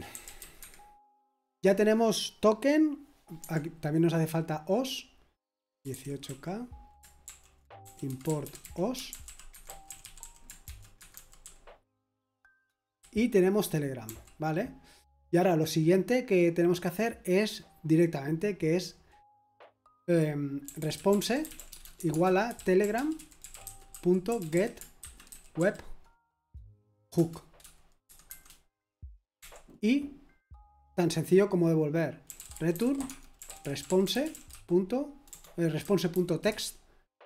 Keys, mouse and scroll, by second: 0.0-0.4 typing, 0.6 Escape, 5.6-12.3 typing, 14.0 typing, 21.7-26.1 typing, 27.1 Return, 27.8-29.4 typing, 32.7-37.2 typing.